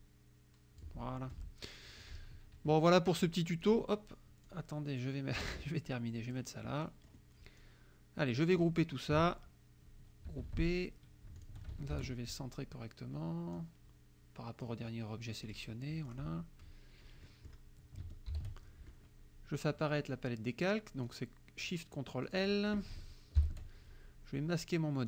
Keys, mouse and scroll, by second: 1.3 F1, 2.2 KP_Subtract, 3.7 click, 4.5-6.6 drag, 6.8 click, 7.6 click, 10.3 ctrl+g, 11.4 shift+click, 12.0 ctrl+shift+a, 13.6-14.9 drag, 15.5 click, 16.1 click, 17.3 click, 18.3 ctrl+shift+l, 21.1 click, 21.7 click, 22.3 click, 23.4 ctrl+shift+l.